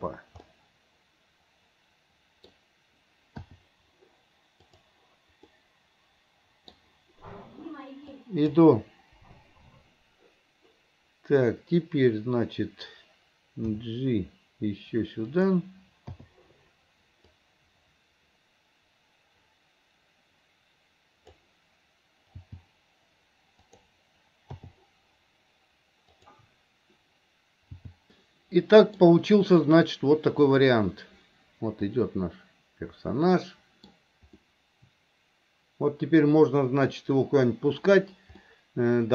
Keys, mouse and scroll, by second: 0.5 scroll up 1, 0.7-2.5 middle drag, 2.5-3.5 scroll down 1, 4.8 click, 5.6-6.8 middle drag, 8.1-8.6 drag, 17.5-23.8 drag, 26.3 click.